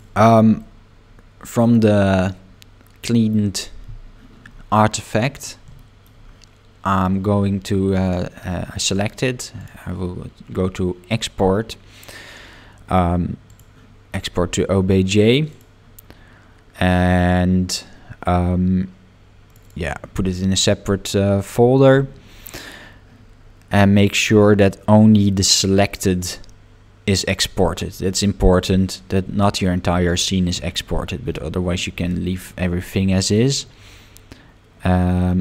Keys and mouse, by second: 0.6-3.3 middle drag, 5.8 shift+middle click, 9.6-13.8 drag.